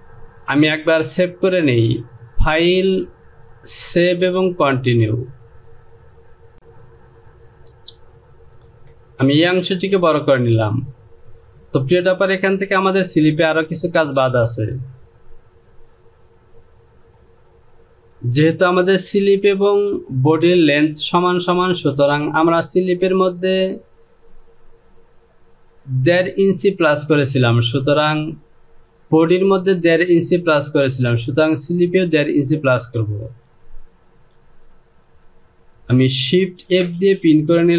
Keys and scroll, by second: 8.7 Return, 36.5 shift+f.